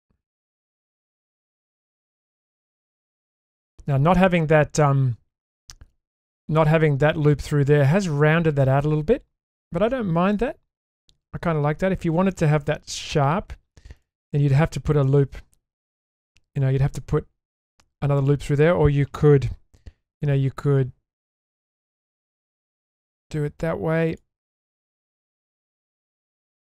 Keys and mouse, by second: 1.5 Tab, 2.5 Tab, 3.5 Tab, 8.9 Tab, 10.4-10.8 middle drag, 14.0 click, 14.3 Tab, 15.0-15.7 shift+middle drag, 19.8 k.